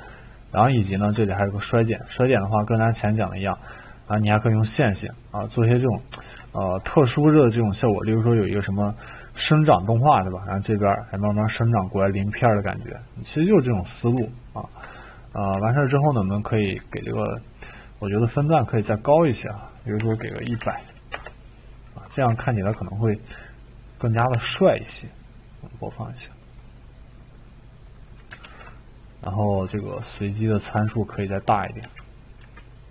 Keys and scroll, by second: 19.7-21.0 typing, 21.1 Return, 24.3 2, 26.2-27.0 typing, 28.4 ctrl+z, 31.8-32.9 typing.